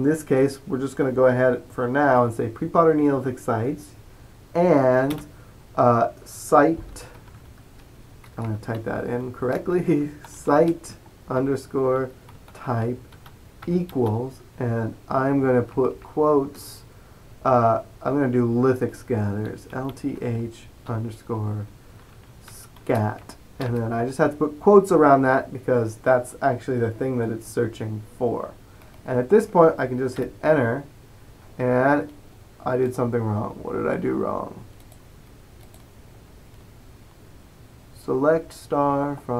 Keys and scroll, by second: 6.8-13.7 typing, 16.0 typing, 19.3-23.7 typing, 30.3 Return.